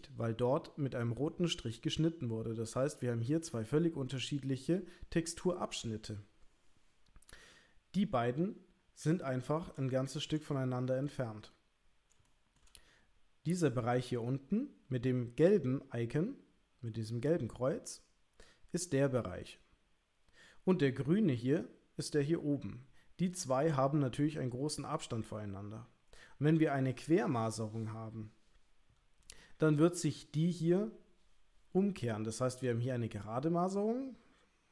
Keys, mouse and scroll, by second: 5.8 l, 9.4 shift+click, 10.7 shift+click, 12.3 shift+click.